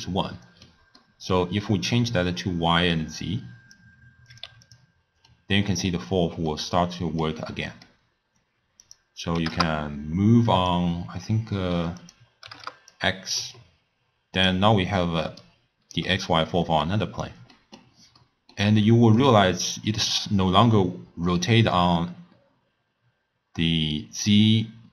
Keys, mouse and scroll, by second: 2.9 drag, 4.3 click, 5.4-8.9 middle drag, 8.9-15.3 drag, 15.3 d, 15.4 right click, 16.0 d, 16.1 d, 16.3-20.2 middle drag, 20.2-23.2 drag.